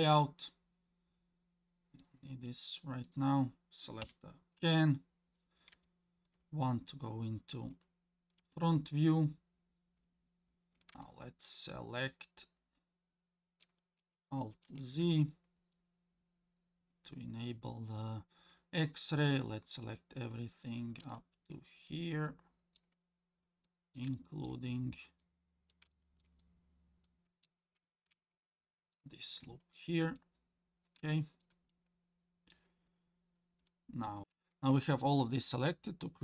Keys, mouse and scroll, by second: 0.1-0.8 scroll down 1, 2.5 middle click, 3.0 click, 4.0 KP_1, 5.0 scroll up 1, 5.8-6.3 shift+middle drag, 8.4 Tab, 10.5 scroll up 1, 11.0 shift+middle click, 14.6 alt+z, 15.7-20.7 drag, 21.1 shift+middle click, 21.9 middle click, 23.1-23.9 scroll up 3, 23.7 middle click, 24.1 shift+middle click, 24.7 scroll up 2, 25.2 middle click, 25.9 shift+middle click, 26.4 middle click, 28.9 alt+shift+click, 29.7 middle click, 30.4-31.1 scroll down 3, 31.1 shift+middle click, 31.7 middle click, 32.9 scroll down 1, 33.7 middle click, 34.2 ctrl+z, 35.2-36.2 middle drag.